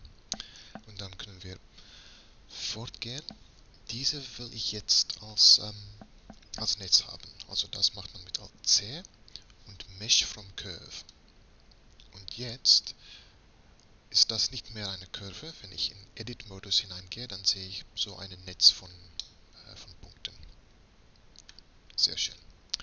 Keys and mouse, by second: 8.8 alt+c, 13.6-14.6 drag, 15.7 Tab, 21.1-22.8 middle drag, 22.4 Tab.